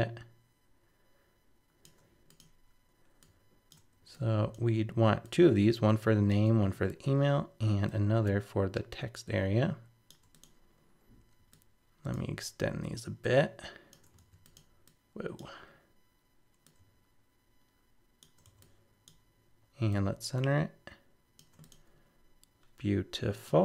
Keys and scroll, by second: 14.2 super+z.